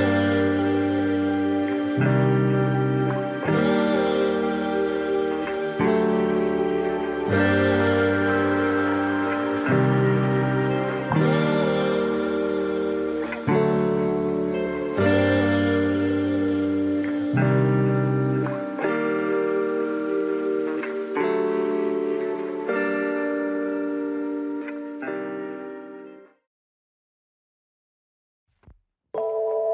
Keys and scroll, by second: 6.2 space, 9.8 space, 15.0 space, 16.6 ctrl+=, 16.7 ctrl+=, 16.8 ctrl+-, 18.9 ctrl+=, 23.5 space.